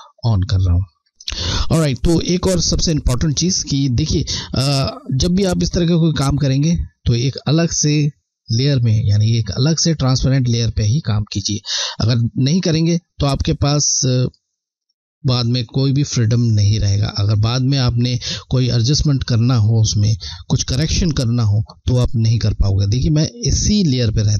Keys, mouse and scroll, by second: 0.6 scroll down 1, 0.8 scroll, 12.8 click.